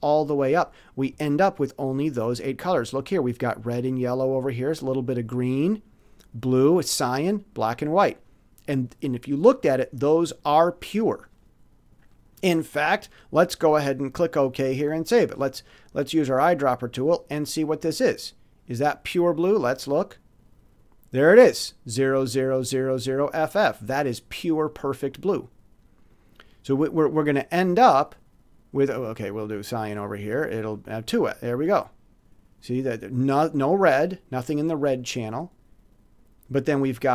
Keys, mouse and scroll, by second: 13.6 click, 15.8-16.1 scroll up 2, 17.9 click, 19.5 click, 26.0 click, 28.8 click, 30.0 click, 31.5 click, 33.1 click, 34.3 click, 35.0 click, 36.4-37.1 drag.